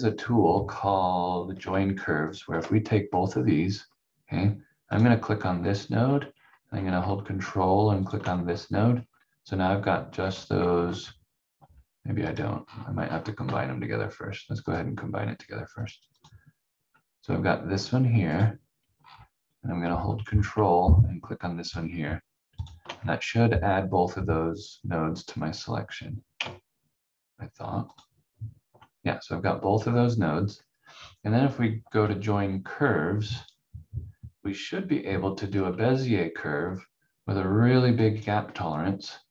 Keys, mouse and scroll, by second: 2.3 shift+click, 3.7 scroll up 1, 4.9 click, 5.3 scroll down 1, 6.3 scroll up 1, 7.9 ctrl+click, 8.4-8.8 scroll down 1, 10.1 scroll up 1, 12.3 click, 12.6 scroll down 1, 13.4 v, 14.6 click, 16.7-18.3 scroll up 1, 18.3 click, 19.0 scroll down 1, 19.9 scroll up 1, 21.6 ctrl+click, 22.5 ctrl+click, 23.0-23.3 scroll down 1, 27.8 ctrl+click, 33.4 click, 38.0 click.